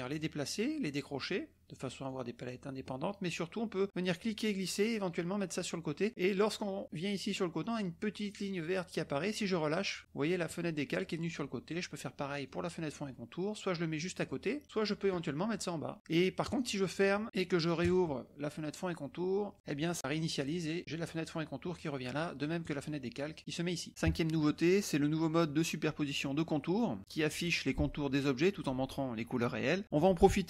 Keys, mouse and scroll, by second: 1.3 click, 2.0 click, 4.0-9.5 drag, 12.4-14.5 drag, 14.6-15.9 drag, 16.4 click, 17.8 click, 22.6 click.